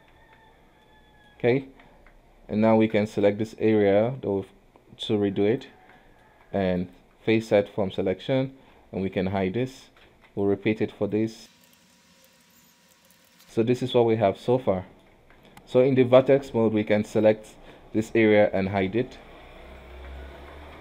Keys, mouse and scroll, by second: 0.1 scroll down 1, 0.3 Tab, 0.9 middle click, 1.6 KP_3, 2.0 Tab, 2.5-2.8 scroll up 2, 2.8 alt+a, 3.1 shift+z, 3.8 click, 5.9 Tab, 6.1 middle click, 6.4 q, 7.5 shift+z, 7.8 middle click, 8.2 Tab, 9.1 h, 9.5 middle click, 9.8 KP_1, 10.1 shift+z, 10.5 click, 11.5 middle click, 11.6 Tab, 11.8-13.1 typing, 11.9 click, 12.2 Tab, 12.5 scroll down 2, 12.6 click, 12.9 Tab, 13.1 middle click, 13.2 alt+a, 13.2 Tab, 13.3 alt+h, 13.4-15.3 middle drag, 15.3 Tab, 15.7 alt+a, 17.2 click, 18.1 middle click, 19.0 h, 19.5 KP_1, 20.1 Tab, 20.5 Tab.